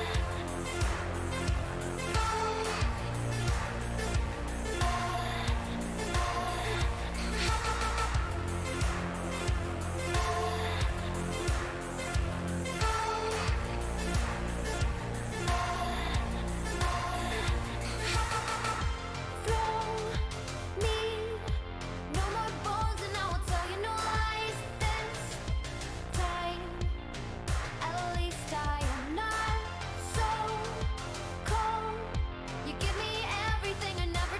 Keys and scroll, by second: 1.7 Return, 2.1-5.0 typing, 5.2 Up, 5.6 Return, 10.3-12.3 typing, 22.0-23.3 typing, 23.6 Return, 27.5-31.8 typing.